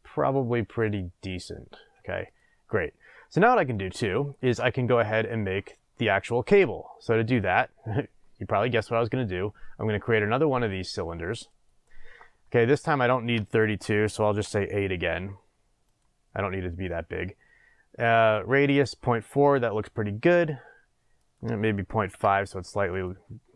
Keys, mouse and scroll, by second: 0.6 click, 2.2 click, 2.8 scroll down 1, 3.9-7.4 shift+middle drag, 7.4-15.9 drag, 21.1-23.0 drag, 23.0 middle click.